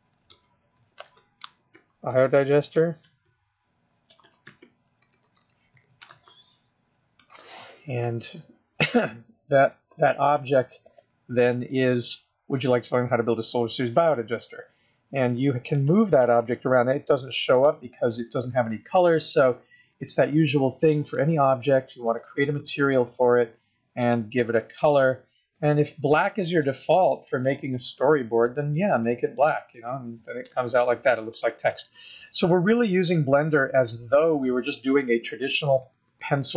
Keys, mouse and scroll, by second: 0.0-6.3 typing, 7.4 Return, 11.1 click, 15.2 g, 16.6 g, 21.3 click, 22.3 click, 24.2 click, 25.0 click, 29.6 click, 33.6-34.0 scroll down 2, 34.0-35.8 scroll up 4, 36.1 shift+middle click.